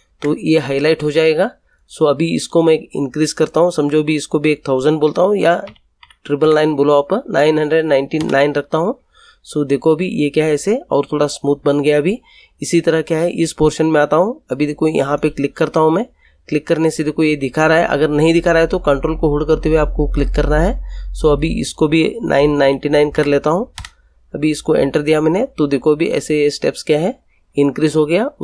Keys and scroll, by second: 5.6 9, 8.1 Return, 22.3 9, 23.7 Return.